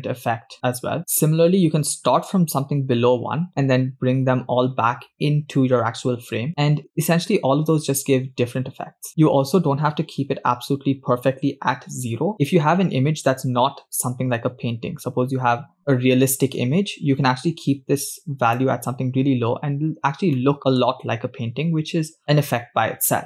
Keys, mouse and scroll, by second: 19.5-20.3 scroll up 5, 20.9 shift+middle click, 22.2 scroll down 5.